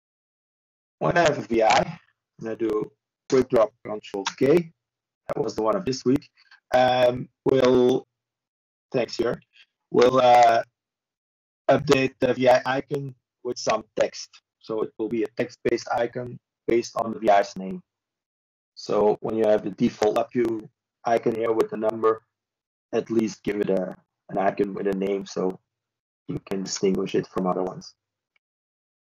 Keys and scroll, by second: 0.3-1.0 typing, 1.8 ctrl+b, 10.3 ctrl+space, 11.0-11.9 typing, 14.9 typing, 18.5 ctrl+shift+b, 25.3 ctrl+space, 25.7-27.0 typing, 28.2-28.9 typing.